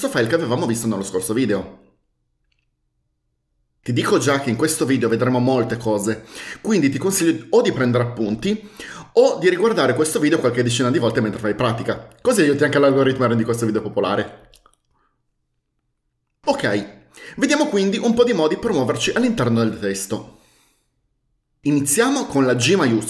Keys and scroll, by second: 0.2 Return, 22.9 shift+g.